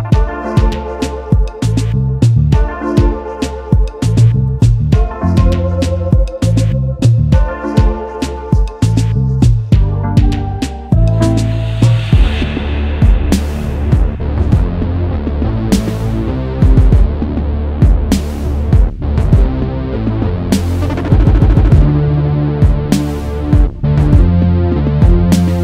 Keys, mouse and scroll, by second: 0.1 double click, 2.8-3.3 alt+scroll up 1, 3.6 double click, 18.7 double click, 20.9-21.3 alt+scroll down 1, 21.5 space.